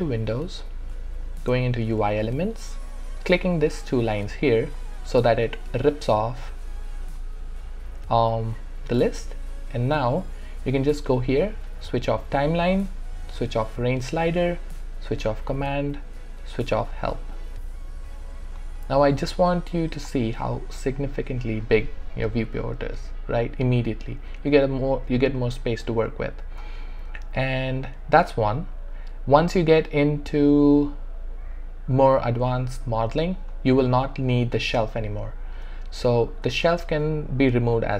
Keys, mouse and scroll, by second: 0.1 click, 4.7-11.7 drag, 19.9 click, 25.3 click, 25.4 alt+right click, 25.8 alt+click, 26.9 alt+middle click, 27.4 alt+right click, 27.9 alt+click, 28.6 alt+middle click, 35.6 space.